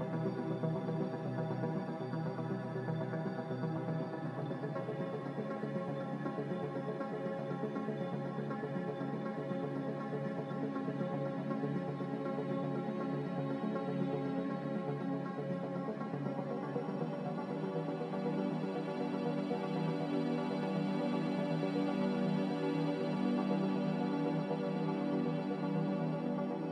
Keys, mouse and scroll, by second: 1.4 b, 6.5 x, 7.5 5, 8.0-9.4 Return, 11.1 z.